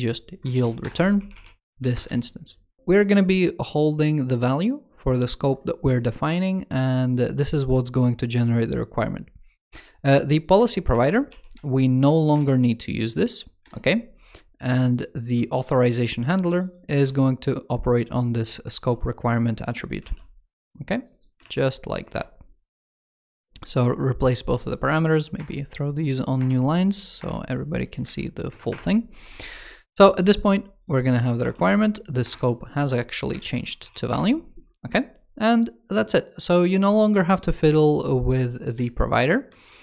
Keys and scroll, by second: 10.4 ctrl+s, 16.8 super+c, 19.8 super+v, 21.3 super+v, 27.9 super+z, 33.2 ctrl+shift+f, 39.4 super+s.